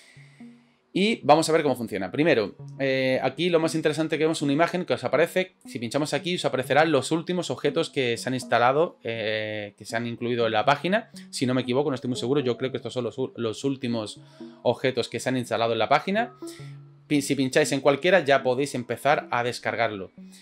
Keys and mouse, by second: 5.8-20.4 drag.